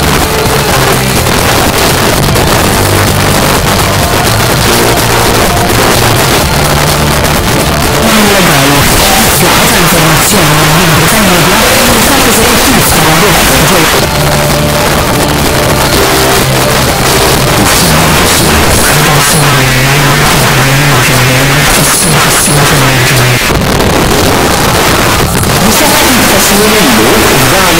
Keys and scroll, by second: 0.1 Down, 0.2 Down, 0.4 Down, 0.5 Down, 0.7 Down, 1.0 Down, 1.1 Down, 1.5 Down, 1.8 Return, 13.9 Page_Down, 23.4 Page_Down.